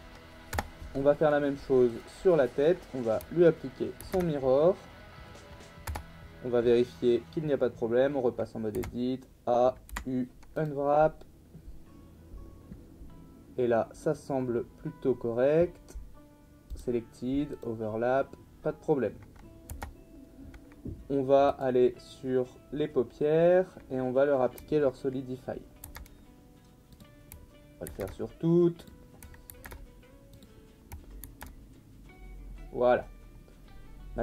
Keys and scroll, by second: 0.5 Tab, 4.0 ctrl+a, 5.9 Tab, 8.7 a, 9.9 u, 19.7 Tab, 25.8 ctrl+a, 27.9 ctrl+a, 29.6 ctrl+a, 31.2 ctrl+a.